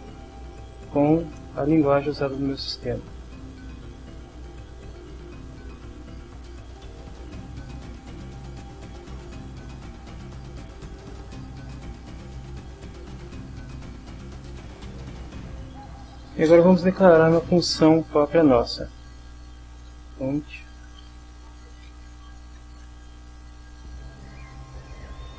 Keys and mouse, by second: 4.8 click, 7.1 click, 8.1 click, 14.0 click, 18.2 click, 19.4-24.9 typing.